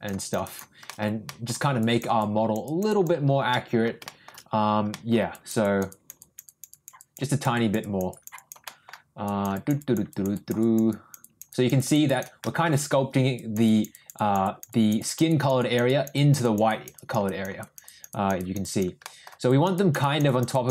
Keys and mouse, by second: 0.2 click, 0.4 click, 0.9 shift+middle click, 1.3 middle click, 1.8 click, 2.2 click, 2.6 click, 2.9 click, 3.5 middle click, 4.0 shift+middle click, 4.9 middle click, 5.3 click, 5.6 click, 5.9 click, 6.2 click, 6.4 click, 6.7 click, 7.0 click, 7.3 click, 7.5 click, 7.8 click, 8.1 click, 8.3 click, 8.6 middle click, 9.2 click, 9.5 click, 9.8 click, 10.1 click, 10.3 click, 10.6 click, 10.9 click, 11.2 click, 11.5 click, 11.7 click, 12.0 click, 12.4 shift+middle click, 13.3 click, 13.6 click, 13.9 click, 14.1 click, 14.4 click, 14.7 click, 15.0 click, 15.3 click, 15.6 click, 15.8 click, 16.1 click, 16.4 click, 16.7 click, 16.9 click, 17.2 click, 17.6 click, 17.8 click, 18.1 click, 18.3 click, 18.6 click, 19.0 middle click, 19.5 click, 19.7 click, 20.0 click, 20.3 click, 20.5 click.